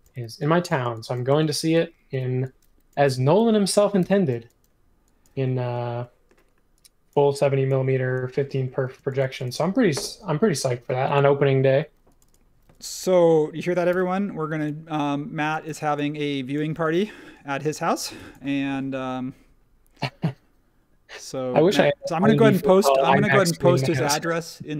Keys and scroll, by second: 0.0-0.2 typing, 1.3 space, 2.1 p, 4.0 e, 8.8 space, 13.9 m, 15.6 space, 15.6 e, 16.8 space.